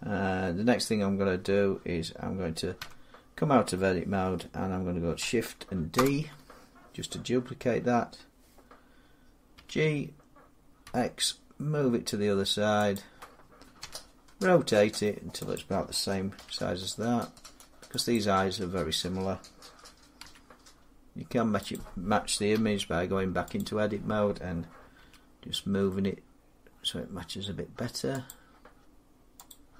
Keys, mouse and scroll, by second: 2.6 Tab, 5.8 shift+d, 9.4 g, 10.7 x, 12.8 click, 13.6 r, 15.4 click, 16.2 g, 18.0 click, 20.1 g, 21.6 click, 23.0 Tab, 23.4 click, 24.8 g, 26.8-27.4 scroll up 6, 28.1 click, 28.6 scroll, 29.3 click.